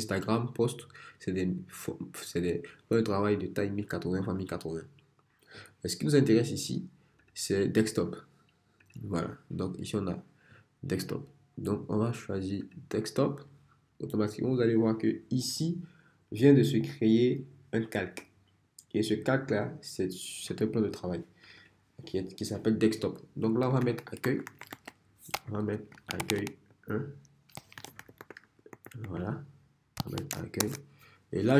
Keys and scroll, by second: 23.5-25.4 typing, 26.7-30.4 typing, 30.6 Return.